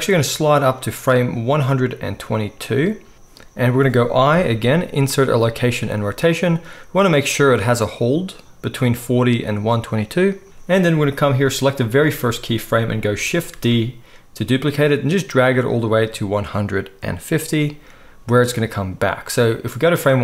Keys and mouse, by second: 0.3-17.6 drag, 6.4 i, 13.5 shift+d, 17.6-19.3 middle drag, 19.3-20.2 drag.